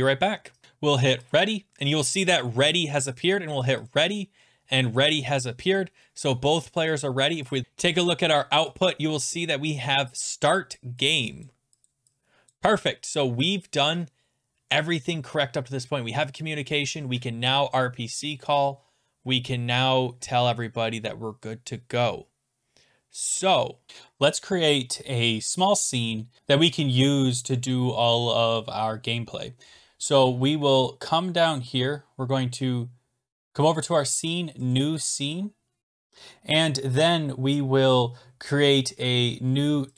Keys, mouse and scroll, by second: 1.4 click, 3.9 click, 7.5 click, 7.6 click, 9.3 click, 10.8 click, 11.4 click, 11.9 click, 12.5 click, 13.0-14.1 scroll down 15, 14.1-14.6 scroll down 13.